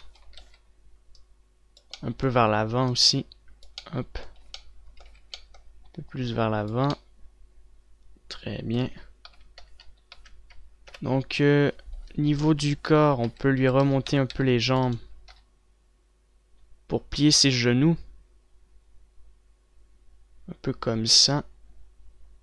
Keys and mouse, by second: 1.4 ctrl+z, 5.2 z, 5.8 z, 10.0 KP_3, 10.3 KP_1, 10.7 KP_3, 11.4 KP_5, 13.2-14.8 typing, 15.9 g.